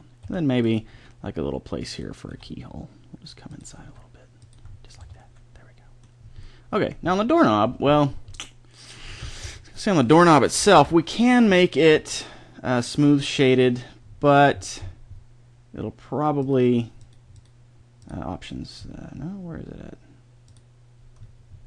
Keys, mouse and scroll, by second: 0.2 e, 0.9 s, 2.2 e, 3.8 s, 5.0 Tab, 9.4 Tab, 10.7 ctrl+l.